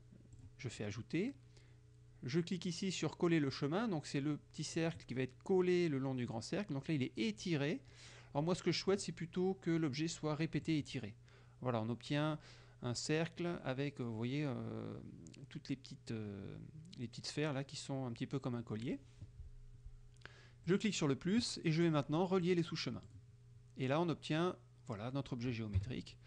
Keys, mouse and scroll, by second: 0.4 click, 4.9 click, 9.0 click, 10.7 click, 20.7 click, 21.9 scroll down 2, 22.5 click, 23.1 click, 25.9 KP_Subtract.